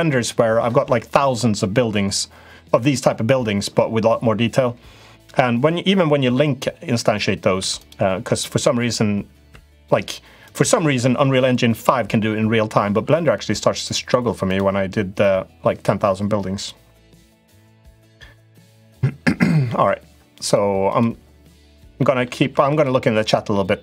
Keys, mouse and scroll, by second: 7.4 2, 7.5 click, 9.3 3, 9.5 click, 10.2 click, 12.7 e, 13.9 2, 15.0-16.4 drag, 20.6 click, 21.7 middle click, 22.2 3, 22.5 click, 23.2 click.